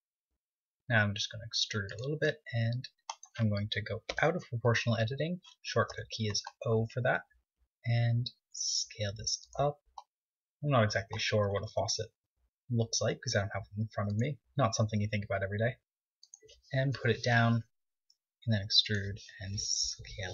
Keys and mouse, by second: 0.9 e, 2.1-3.9 drag, 2.3 s, 4.1 o, 7.5 s, 9.6 click, 11.7 KP_1, 12.2 KP_3, 13.1 r, 14.4 g, 17.9 e, 19.0 s, 19.4-20.3 drag.